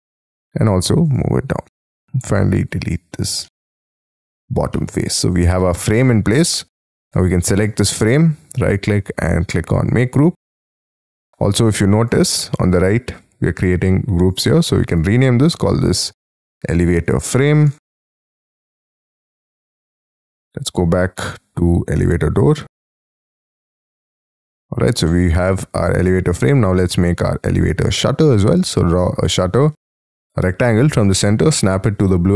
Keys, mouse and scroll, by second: 1.7 space, 2.1 scroll down 2, 2.3 e, 3.4 middle click, 4.2-4.7 scroll down 8, 4.7 middle click, 5.9-6.3 scroll down 5, 6.3 space, 6.4 scroll up 4, 7.2 double click, 7.4 double click, 7.5 double click, 8.4 right click, 12.9-14.3 scroll up 2, 16.2-18.9 typing, 21.0-21.7 scroll up 1, 21.7-23.4 scroll up 1, 23.4 double click, 23.8 double click, 25.1 middle click, 26.3 scroll up 5, 26.6 r, 26.7 scroll down 1, 27.5-28.7 scroll up 11, 28.7-30.2 scroll down 18, 30.5-31.9 scroll down 6, 31.9-32.3 scroll up 5.